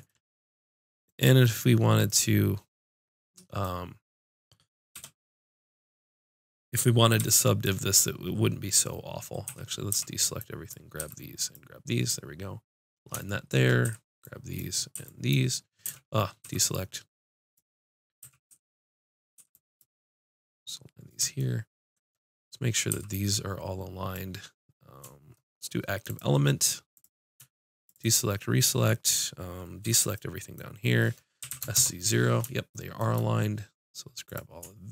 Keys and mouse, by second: 0.0 middle click, 1.0 middle click, 4.9 b, 7.1 b, 9.4 a, 9.9 b, 11.0 b, 12.0 click, 13.8 b, 14.9 b, 15.8 a, 16.4 b, 18.2 a, 18.5 b, 19.6 b, 20.3-22.5 drag, 22.9 b, 26.0-29.7 drag, 29.8 b, 31.4 s, 34.2-34.9 drag.